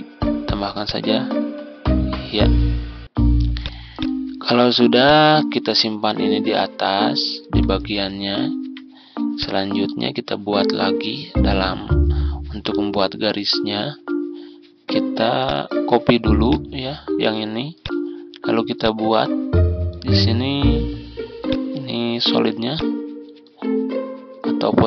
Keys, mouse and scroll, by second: 9.3-24.8 drag.